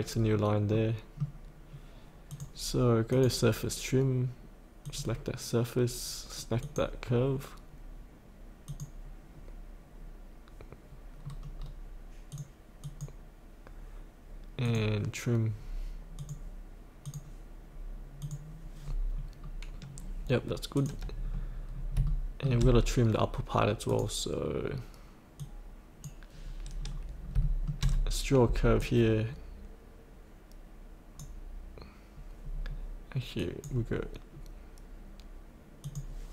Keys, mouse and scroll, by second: 0.3-0.7 scroll down 1, 0.7-2.1 middle drag, 2.3 click, 11.2-12.3 scroll down 1, 12.3 click, 18.8-19.1 scroll up 1, 20.7 click, 21.7 scroll up 1, 22.0 shift+middle click, 23.9-26.7 drag, 27.0-27.3 scroll down 1, 27.4 shift+middle click, 27.6 scroll down 1, 28.8-36.3 drag.